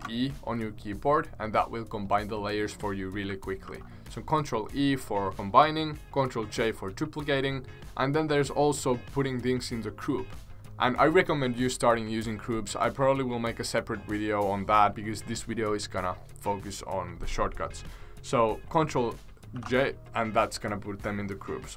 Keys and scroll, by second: 3.6 ctrl+z, 19.5 ctrl+g.